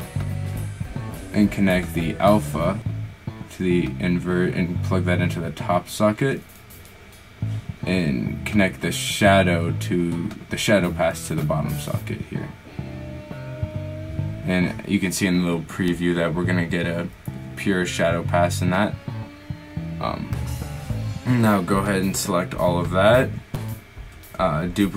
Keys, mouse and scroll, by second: 12.1-12.8 drag, 24.6 shift+d.